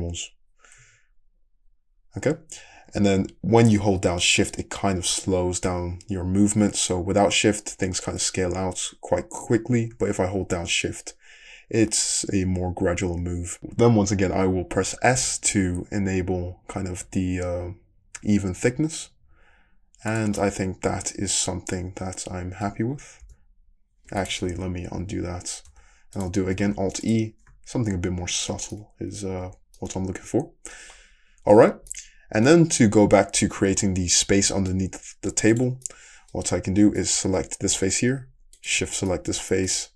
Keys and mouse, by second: 23.2 s, 24.5 ctrl+z, 25.7 s, 26.6 alt+e, 28.8-31.5 middle drag, 29.3 Tab, 31.5 Tab, 34.4 3, 34.5-35.5 middle drag, 35.5 click, 35.8-39.9 middle drag.